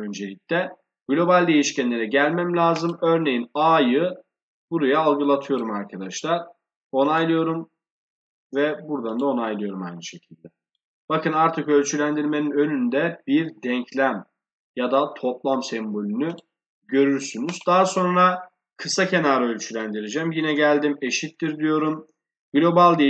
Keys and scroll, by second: 20.2 shift+0.